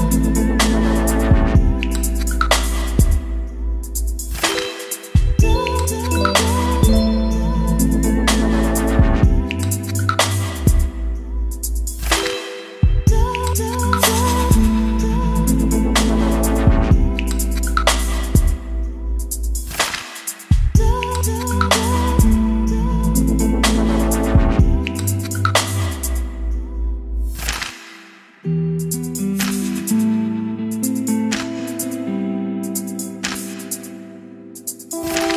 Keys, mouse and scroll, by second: 0.0-2.3 typing, 0.5 ctrl+space, 3.3 Return, 4.3-6.5 typing, 4.6 ctrl+space, 6.8 Return, 7.7-8.8 typing, 10.2 shift+~, 11.9 click, 12.5 Left, 12.8 Return, 13.0 t, 14.0-16.8 drag, 16.5-18.0 typing, 19.9 Right, 22.2 >, 23.6-27.9 typing, 25.0 ctrl+space, 29.4-35.3 typing.